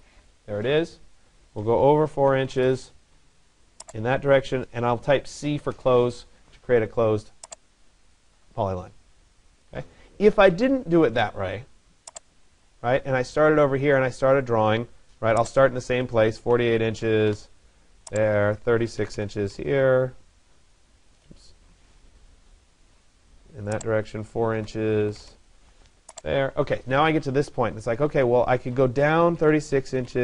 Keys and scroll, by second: 16.1 4, 19.7 shift+Return, 21.2 BackSpace, 28.9 3.